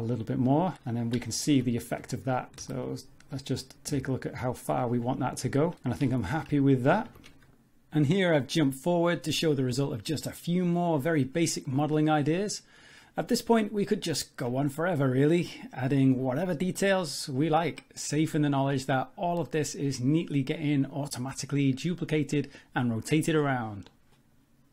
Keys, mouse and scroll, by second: 1.0 scroll down 4, 1.3 shift+middle click, 2.6 g, 5.9 shift+middle click, 6.1 middle click, 6.3 Tab, 6.5 z, 6.8 shift+middle click, 7.9 alt+click, 7.9 2, 8.1 middle click, 8.2 scroll up 2, 8.5 shift+middle click, 8.8 ctrl+b, 9.9 middle click, 10.3 scroll down 3, 10.3 middle click, 11.1 shift+middle click, 12.0 middle click, 12.4 scroll up 2, 12.7 Tab, 12.8-13.2 scroll down 5, 12.8 middle click, 13.2 shift+middle click, 15.6 alt+click, 15.6 shift+middle click, 15.8 middle click, 16.8 x, 17.4 alt+click, 17.6 scroll down 1, 17.7 middle click, 18.0 g, 19.3 scroll down 5, 19.3 middle click, 19.6 middle click, 19.9-20.3 scroll up 3, 20.3 Tab, 20.5 scroll down 4, 20.6 shift+middle click, 20.7 middle click, 21.7 middle click, 22.4 middle click, 22.8 scroll up 2, 23.1 scroll down 1, 23.2 scroll down 2, 23.3 middle click, 23.7 shift+middle click, 24.2 scroll up 1, 24.6 middle click.